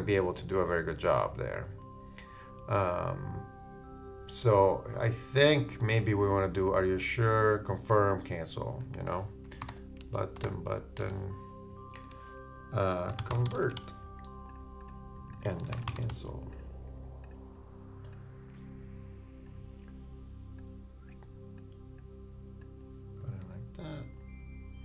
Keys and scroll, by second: 12.9-14.3 typing, 15.6 shift+Return, 15.7 shift+c.